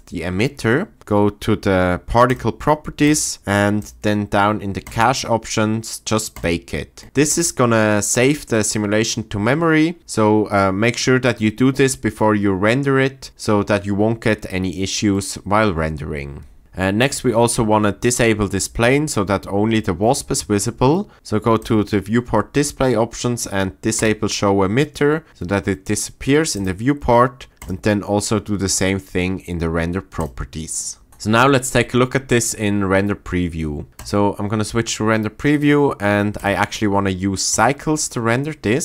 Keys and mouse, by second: 2.3 click, 3.8 click, 15.1 click, 24.0-26.5 drag, 30.2 click, 34.2 click, 36.4-37.8 drag.